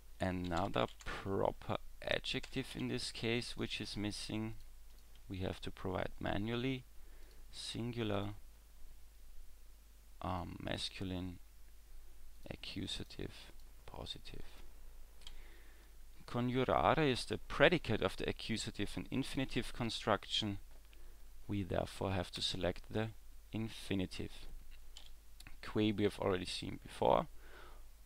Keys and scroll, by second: 15.3 w, 25.0 w.